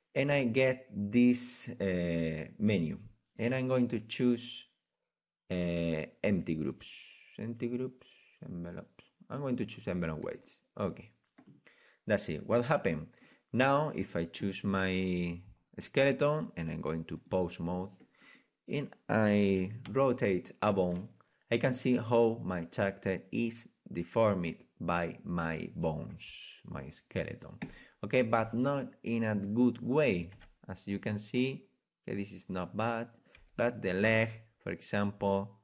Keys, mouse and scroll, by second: 12.4-17.2 right drag, 17.2 click, 18.2-20.1 right drag, 19.9 r, 28.4-29.5 right drag, 29.7-31.9 right drag, 33.2-34.5 right drag, 33.4 r, 34.6 right drag.